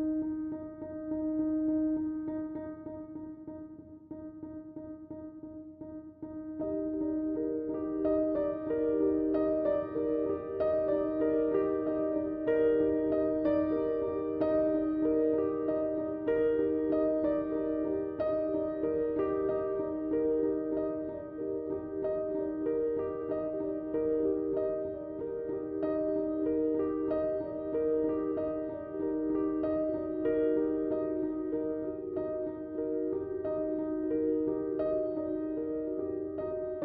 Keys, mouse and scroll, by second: 2.2 Tab, 3.4 click, 6.5 click, 10.5 Tab, 13.2 click, 15.7 space, 16.2 click, 16.4 space, 17.2 space, 17.2 click, 18.3 click, 24.0 click, 32.0 space, 32.1-34.8 drag, 34.8-36.8 shift+drag.